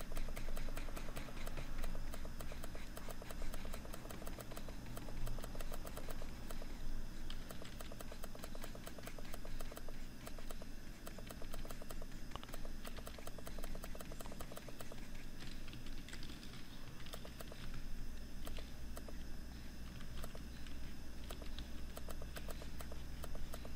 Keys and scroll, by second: 15.1 ctrl+-, 15.7 ctrl+0, 16.4 ctrl+=, 17.0 ctrl+space.